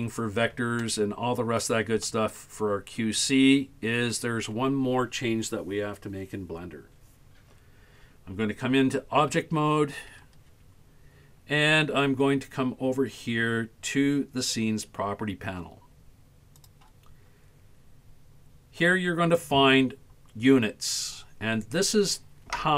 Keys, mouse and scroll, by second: 0.0 scroll down 2, 0.8 shift+middle click, 2.0-4.2 middle drag, 9.3 Tab, 16.6 click.